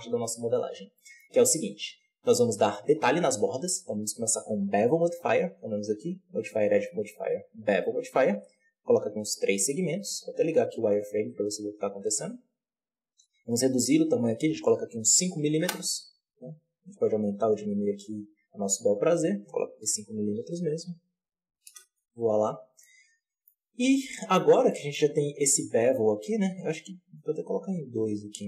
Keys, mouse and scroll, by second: 0.9-1.2 middle drag, 1.2-2.4 scroll up 1, 2.4-3.8 scroll up 2, 3.8 right click, 7.4-15.5 drag, 15.5 m, 16.8-22.4 shift+drag, 22.4-22.7 scroll down 3, 22.7-23.7 middle drag, 23.7 alt+a, 23.9-24.3 middle drag, 24.3 scroll up 1, 24.6-24.9 middle drag, 24.9-26.8 scroll up 1, 26.8-28.4 drag.